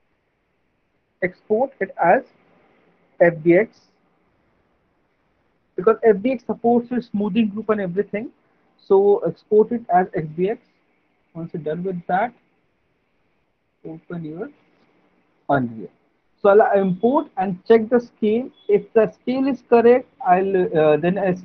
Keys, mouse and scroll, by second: 12.0 click, 13.1 click, 14.3 click.